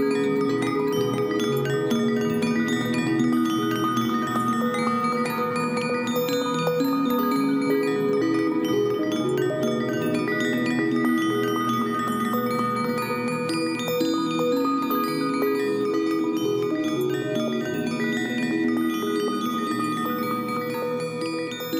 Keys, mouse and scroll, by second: 13.5 ctrl+j, 16.4 right click, 19.0 right click, 19.4 ctrl+j.